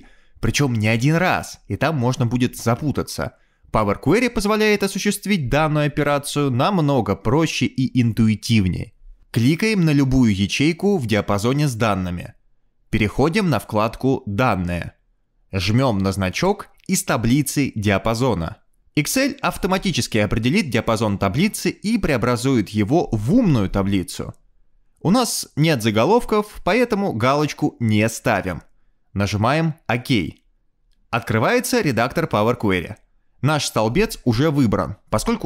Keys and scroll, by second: 0.0-3.4 typing, 4.0 Escape.